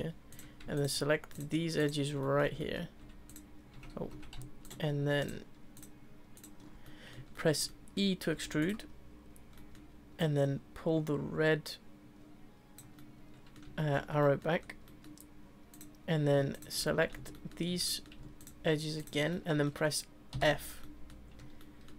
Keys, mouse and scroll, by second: 0.3 click, 0.7 shift+click, 1.3 shift+click, 1.8 shift+click, 2.2-3.3 middle drag, 3.3 click, 3.9 ctrl+z, 4.6 shift+click, 5.2 shift+click, 5.7 shift+click, 6.3 shift+click, 6.8-8.3 middle drag, 8.3 e, 9.5 middle click, 10.2 click, 13.0-14.1 middle drag, 14.1-14.8 scroll up 3, 14.2 middle click, 14.8 middle click, 15.7 click, 16.5 shift+click, 16.8-18.4 middle drag, 18.4 shift+click, 19.0 shift+click, 19.3-20.3 middle drag, 20.3 f, 20.8 middle click, 21.1-21.6 scroll down 1, 21.6-21.9 shift+middle drag.